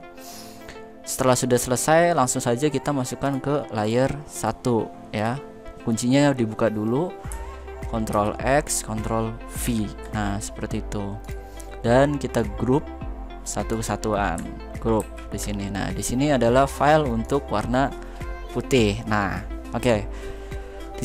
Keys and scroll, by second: 7.8 ctrl+x, 14.7 ctrl+g.